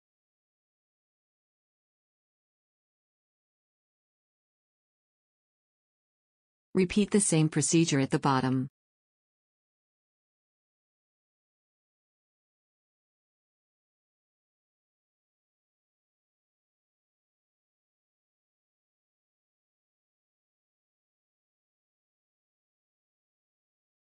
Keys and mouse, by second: 1.5 b, 4.1 click, 4.9 f, 5.2 a, 14.6 w, 16.3 a, 16.9 ctrl+r, 19.0 a, 20.1 middle click, 20.9 g, 22.5 a, 23.7 g.